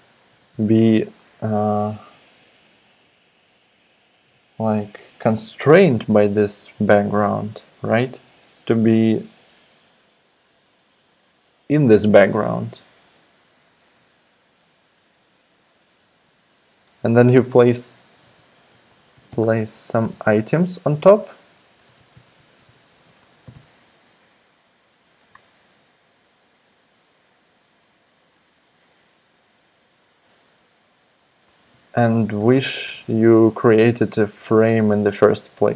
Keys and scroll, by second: 0.0-1.1 typing, 15.6 alt+BackSpace, 16.2 alt+BackSpace, 16.3 alt+BackSpace, 17.8-24.9 typing, 25.3 alt+BackSpace, 27.3 alt+BackSpace, 31.2-33.8 typing.